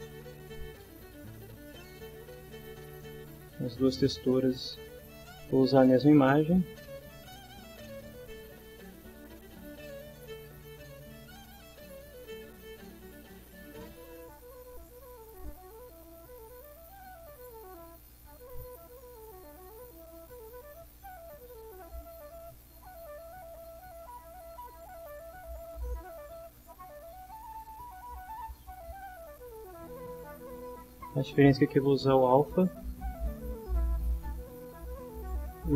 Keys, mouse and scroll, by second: 0.6 ctrl+right click, 2.8 click, 3.7 click, 4.4 right click, 8.4 click, 9.7 click, 10.5 click, 11.5 click, 12.3 click, 13.5 click, 14.7 click, 15.5 click, 16.9 click, 18.0-19.3 drag, 19.5-21.3 drag, 21.8-23.3 drag, 24.6-26.5 drag, 27.6-29.1 drag, 30.8-33.3 drag.